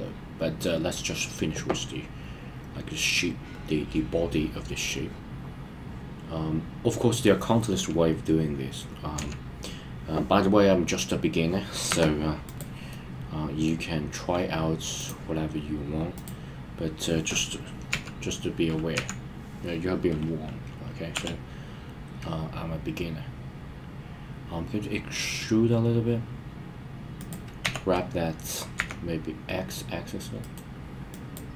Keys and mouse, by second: 4.9-7.3 middle drag, 9.2 KP_1, 11.9 Tab, 12.9-13.7 middle drag, 15.0 click, 16.2 click, 17.9 KP_3, 18.9 KP_1, 21.1 e, 27.2 click, 27.6 g, 28.8 z, 30.4 right click, 31.3 click.